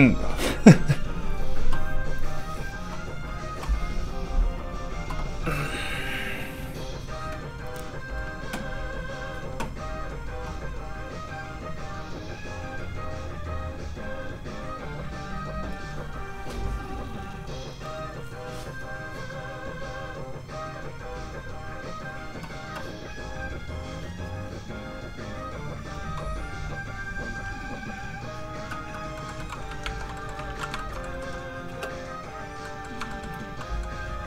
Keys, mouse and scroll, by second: 0.8 right click, 2.1 click, 29.1 middle click, 29.8 ctrl+Tab, 30.2 middle click, 30.4 ctrl+s, 30.7 shift+middle click, 31.2 middle click, 31.6 space, 32.6 middle click, 33.1 shift+middle click, 33.3 scroll up 1, 33.6 middle click.